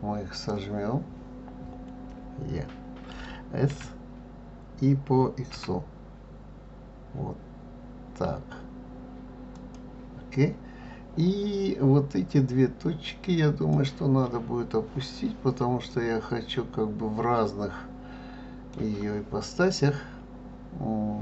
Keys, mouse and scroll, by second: 0.3 click, 3.7 s, 12.5 click, 15.9-18.9 middle drag.